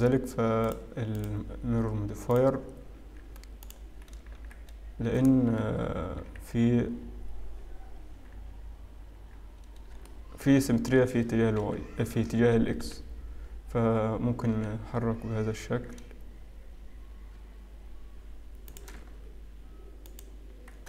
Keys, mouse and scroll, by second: 0.6 click, 1.2 click, 3.2-3.7 scroll up 1, 3.7 alt+click, 4.1-4.7 scroll down 2, 4.6 z, 10.0 shift+middle click, 12.0 g, 12.9 g, 19.5 z.